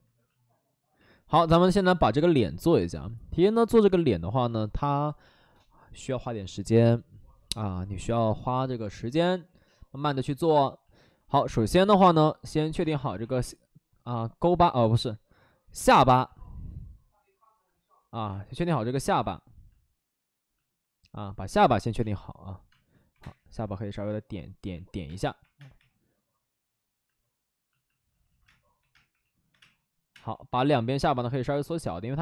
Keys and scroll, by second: 2.0 space, 2.6 space, 2.7 space, 12.7 space, 13.0 1, 18.2 space, 21.5-23.1 typing, 25.0 space, 25.3 3, 25.5 space, 25.6 3, 28.1 ctrl+z, 28.4-30.0 typing.